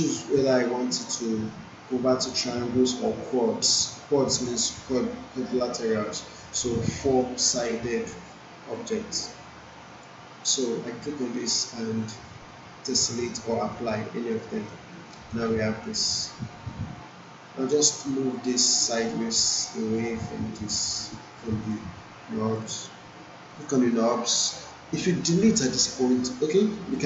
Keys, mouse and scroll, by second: 6.8-10.2 drag, 12.8 click, 14.6 alt+middle click, 15.0 alt+right click, 18.0-21.7 drag, 25.7 Delete.